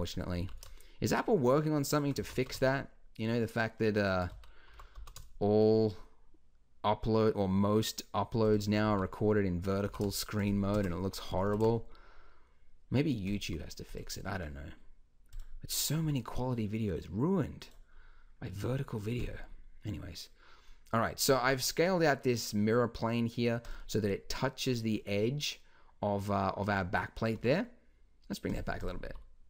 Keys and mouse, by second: 0.3 g, 2.2 g, 4.3 z, 4.7 g, 8.9 z, 10.8 KP_0, 11.4 g, 16.0 s, 18.0-20.6 drag, 20.6 middle drag, 20.7 click, 27.3 g, 29.1 s.